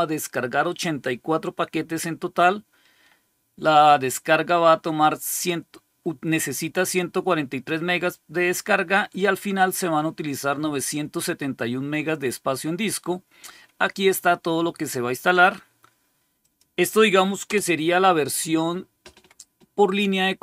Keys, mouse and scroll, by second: 6.4-7.6 drag, 9.6-11.1 drag, 16.3 click, 17.1 click, 17.4 Return.